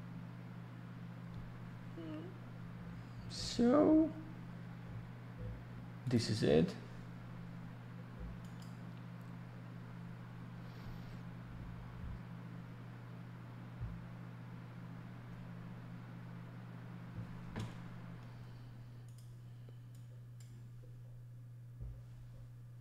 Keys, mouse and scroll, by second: 6.0 click, 6.1 click, 8.4 click, 8.6 click, 19.0 click, 19.1 click, 19.9 click.